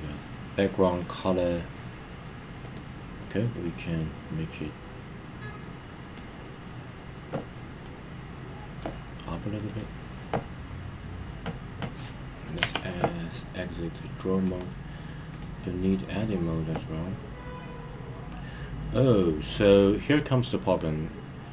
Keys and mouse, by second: 1.0-2.2 drag, 2.6 click, 7.8 middle click, 9.6 click, 14.2 Tab, 14.4-15.3 drag, 16.8-19.6 middle drag, 20.0-21.5 middle drag.